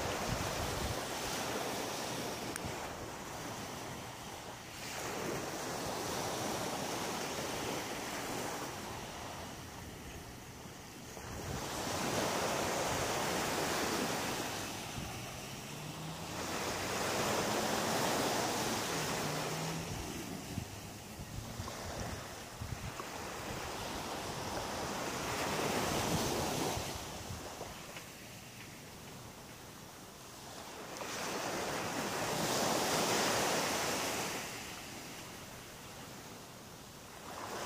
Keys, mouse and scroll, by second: 0.5 middle click, 7.2 middle click, 11.3-11.7 scroll up 1, 11.7 middle click, 14.3 click, 15.2 right click, 15.9 shift+right click, 16.6 right click, 17.6 shift+right click, 18.1 shift+right click, 18.5 middle click, 20.3 shift+right click, 21.0 shift+right click, 21.5 shift+right click, 21.9 middle click, 23.3 shift+right click, 24.6 shift+right click, 25.4 shift+right click, 26.0 middle click, 29.1-29.5 scroll up 5, 29.8 middle click, 30.5-31.2 scroll up 4, 32.3 e, 33.7 click, 34.0 middle click, 34.8-35.7 scroll down 8, 35.8 middle click, 37.0 g.